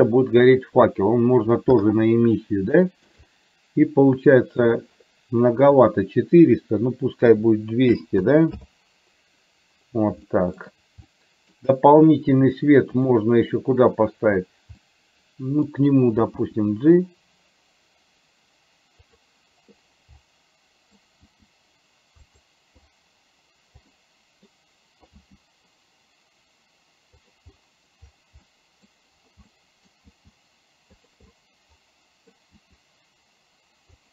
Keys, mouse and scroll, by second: 2.9 shift+middle click, 3.4-4.8 middle drag, 6.0-8.6 drag, 8.3 KP_0, 10.5 shift+middle click, 11.1 middle click, 14.9 middle click, 16.5 g, 20.3 middle click, 21.8 g, 24.0 middle click, 25.1 g, 28.6 middle click, 29.6 middle click, 31.1 g, 31.5-32.5 middle drag, 32.6 g.